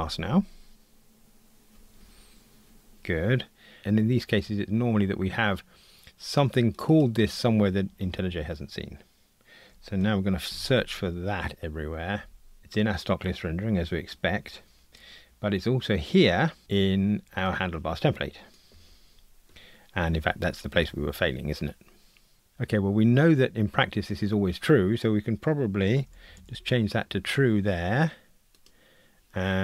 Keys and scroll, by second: 10.7 shift+super+f, 11.3 shift+super+f, 22.5 super+z.